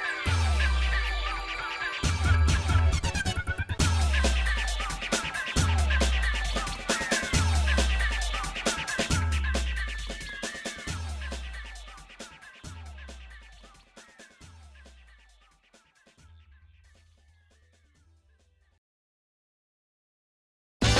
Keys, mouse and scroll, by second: 0.4 g, 3.3 click, 4.3 g, 7.3-8.4 shift+middle drag, 8.9 middle click, 9.5 middle click, 10.2 click, 11.2 g, 13.7 Tab, 14.0 middle click, 14.6 scroll down 1, 14.6 scroll up 1, 14.9-15.3 scroll down 1, 15.4 shift+middle click, 16.3 middle click, 17.0 shift+middle click, 18.6 click, 19.3 middle click, 20.3 shift+d.